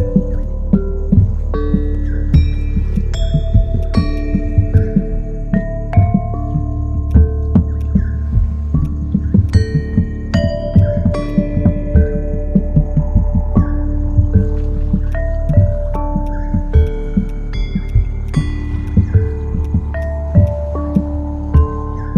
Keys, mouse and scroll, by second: 2.6 ctrl+z, 4.8 ctrl+shift+click, 5.3 ctrl+shift+space, 15.4 shift+click.